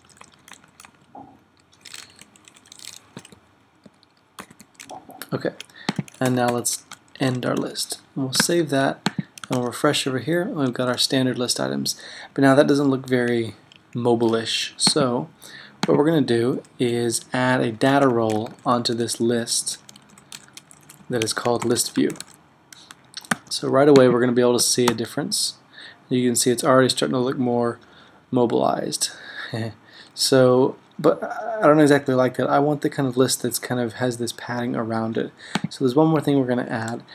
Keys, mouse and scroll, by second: 0.0-4.6 typing, 2.4 Down, 5.9-6.6 typing, 6.3 Return, 7.3 alt+super+., 8.5 super+s, 9.6 super+r, 17.9-22.8 typing, 23.4 super+s, 25.0 super+r, 36.6 Right.